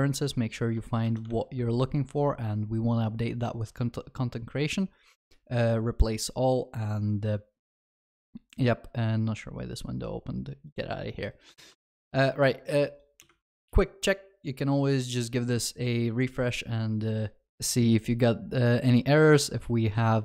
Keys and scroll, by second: 1.3 ctrl+v, 11.8 ctrl+s.